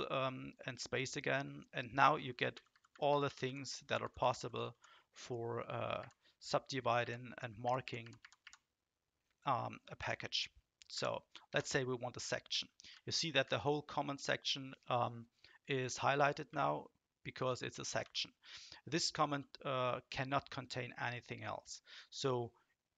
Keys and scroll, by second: 2.5 Down, 2.7 Down, 2.9 Down, 3.1-4.3 Down, 4.7 Down, 6.0 Up, 7.0 Up, 7.4 Up, 7.6-11.5 Up, 11.5 Return, 12.9 Right, 13.4 Right, 16.5 Left, 18.0 Left.